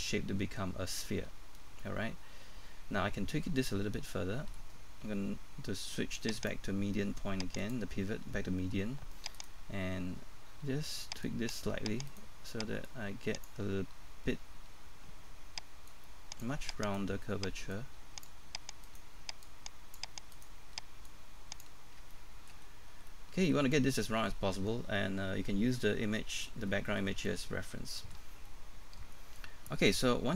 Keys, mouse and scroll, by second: 6.3 click, 9.3 right click, 9.8-11.2 scroll up 1, 11.2 click, 12.1 right click, 12.8-16.8 drag, 16.8 right click, 17.7 click, 18.8 right click, 19.4 click, 20.3 right click, 21.1 click, 22.6-23.1 scroll up 1, 23.1 middle click, 25.0-25.5 scroll down 1, 26.7 middle click, 28.3 scroll down 1, 28.5 middle click.